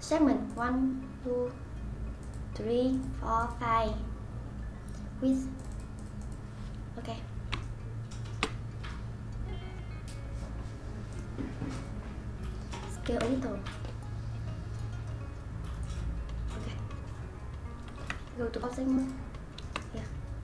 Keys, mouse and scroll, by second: 5.7-7.6 drag, 7.6-8.8 shift+middle drag, 8.8-9.3 scroll down 1, 9.3-10.8 scroll up 1, 10.8 scroll up 1, 11.1 click, 11.7 click, 13.1 s, 18.1 Tab, 19.0 click, 19.8-20.4 middle drag.